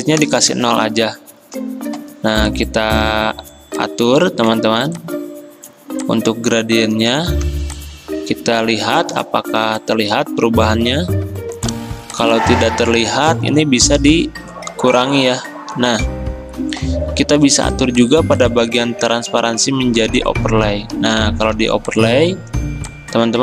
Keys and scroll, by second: 0.2 0, 0.6 Return, 1.9 g, 7.5 v, 9.2 ctrl+z, 21.6 v.